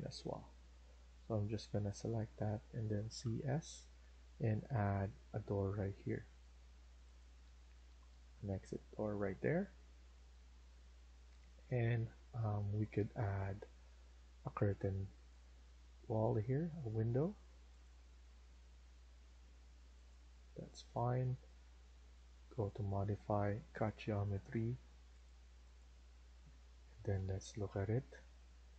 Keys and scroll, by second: 0.4 Escape, 0.8 Escape, 0.9 Escape, 3.0 typing, 6.1 typing, 7.3 Escape, 7.6 Escape, 7.8 Escape, 10.3 Escape, 10.6 Escape, 20.2 Escape, 20.6 Escape, 20.8 Escape, 26.0 Escape, 26.2 Escape.